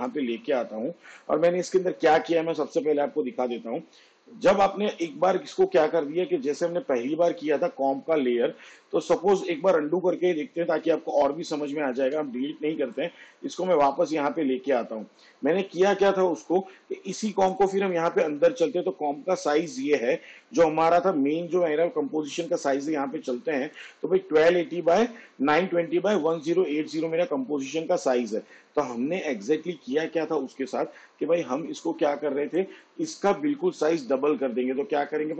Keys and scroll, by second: 1.2 ctrl+v, 10.1 ctrl+z, 21.0 shift+/.